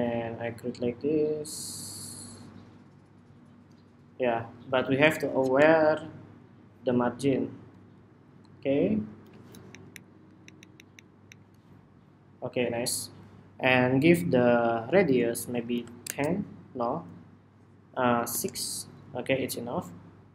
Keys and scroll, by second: 9.5 alt+shift+Up, 9.6 alt+shift+Up, 10.2 alt+Up, 10.3 alt+Up, 10.5 alt+Up, 10.7 alt+Up, 11.0 alt+Up, 12.1 alt+Up.